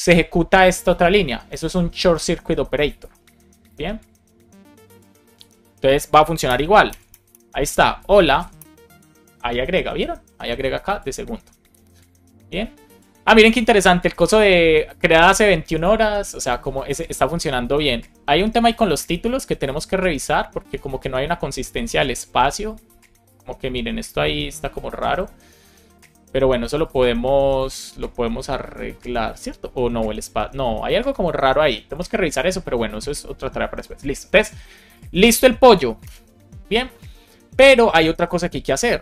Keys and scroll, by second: 6.3 Return, 8.5 Return, 35.9 Return.